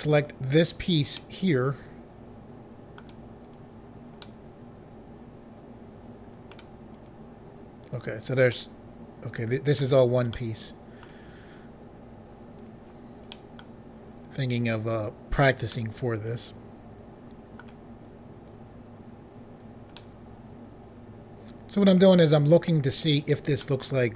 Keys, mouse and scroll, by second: 0.1 click, 1.2 middle click, 3.4 click, 4.2 middle click, 6.9 click, 8.3 click, 8.5 middle click, 10.3 middle click, 12.6 click, 13.3 middle click, 14.2 click, 15.7 middle click, 18.4 click, 20.0 middle click, 23.6 middle click.